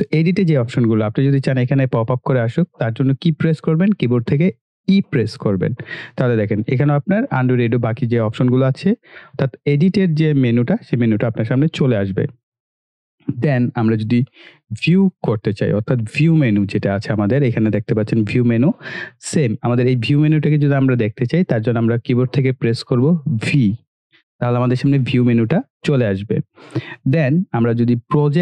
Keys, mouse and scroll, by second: 2.5 click, 14.9 click, 18.1 click, 23.6 v, 26.7 click.